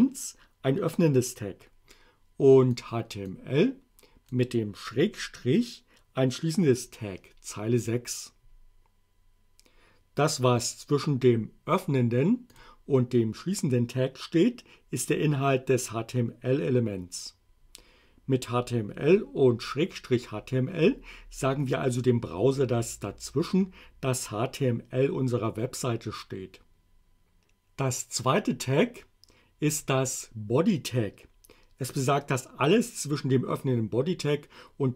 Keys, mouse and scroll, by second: 2.8 click, 3.3-4.6 drag, 12.5 click, 29.8 click.